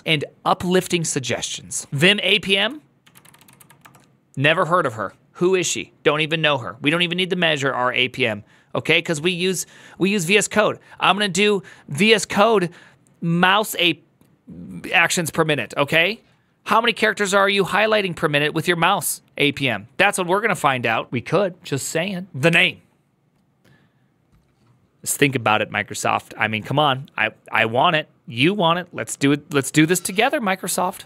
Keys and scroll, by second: 1.9 alt+{, 1.9 ctrl+a, 1.9-3.8 typing, 2.3 ctrl+f, 22.3 alt+f, 27.6 typing.